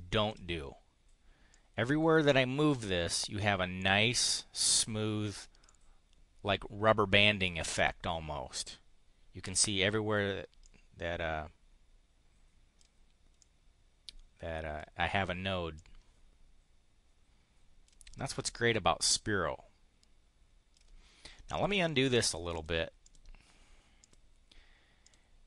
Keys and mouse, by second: 1.4-3.2 drag, 5.7-7.5 drag, 10.6-12.9 drag, 13.4-14.9 drag, 15.7-18.0 drag, 18.5-20.8 drag, 21.4 click, 22.0 click, 22.2 click, 22.5 click, 23.0 click, 24.0 click, 25.0 click.